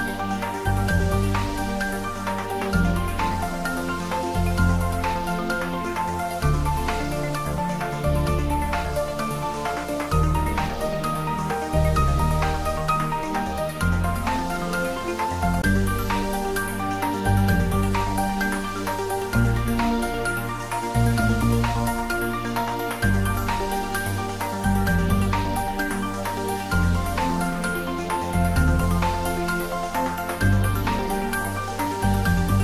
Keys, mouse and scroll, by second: 0.2 r, 0.4 r, 3.3 r, 3.7 Down, 9.1 Down, 18.4 Right, 20.3 Left, 22.3 Right, 24.8 Right, 28.7 click, 30.1 scroll down 1, 31.4 middle click, 32.5-32.6 scroll up 1.